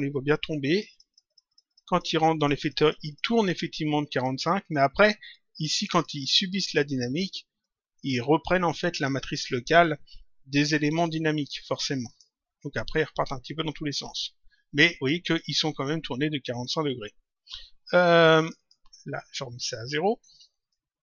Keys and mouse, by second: 0.6 click, 7.1 click, 12.0 click, 15.1 click, 18.3 click, 19.6 click.